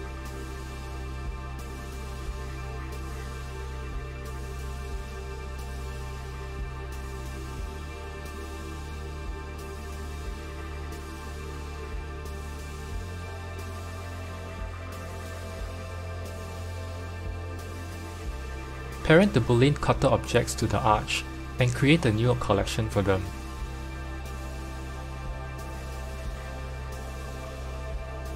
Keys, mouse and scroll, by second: 2.5 click, 4.2 click, 6.1 click, 6.6 right click, 8.2 q, 10.7 click, 11.3 g, 14.3 click, 17.3-19.2 middle drag, 19.2 click, 20.3 shift+click, 21.2 ctrl+p, 24.5-26.0 middle drag, 26.0 click, 28.2 click.